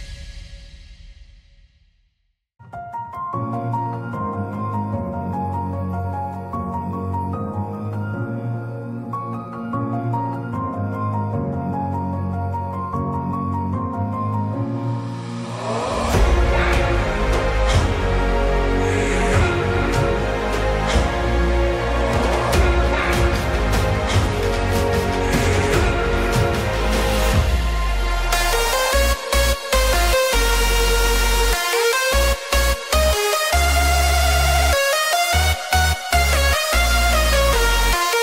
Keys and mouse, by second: 0.8 click, 1.7 shift+middle click, 3.4 middle click, 3.9 KP_0, 3.9 KP_3, 5.6 1, 6.8 click, 9.9 k, 16.7 middle click, 19.4 ctrl+r, 24.4 Return, 25.1-26.3 middle drag, 29.5 2, 31.0 KP_3, 32.2 click, 34.4 g, 34.5 z.